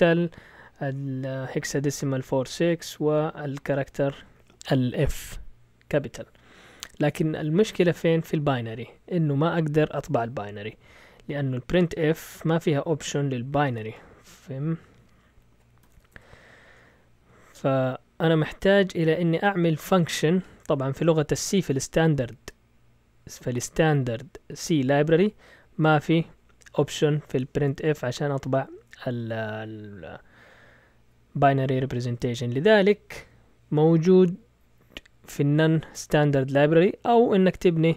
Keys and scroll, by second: 13.3-14.2 typing, 15.5-18.7 typing, 17.9 Down, 19.2 Down.